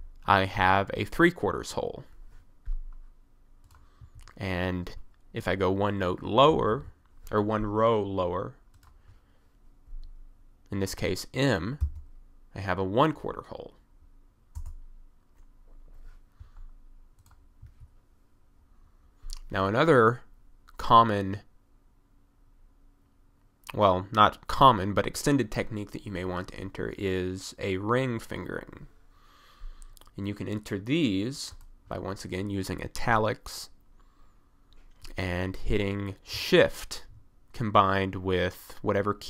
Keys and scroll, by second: 4.0 1, 6.5 f, 6.6 d, 6.7 s, 11.9 m, 14.6 Return, 17.7 1.